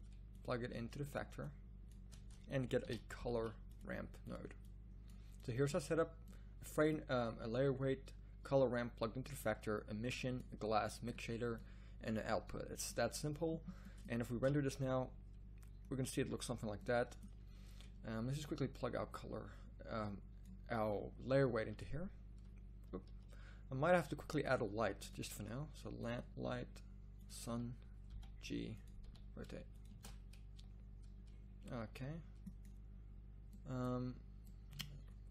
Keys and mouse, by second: 14.5 shift+z, 22.9 z, 23.0 z, 23.8 drag, 24.0 drag, 24.8 click, 26.5 click, 27.2-27.9 drag, 28.1 g, 29.0 r, 30.1 shift+z, 31.8 z, 33.3-34.6 drag.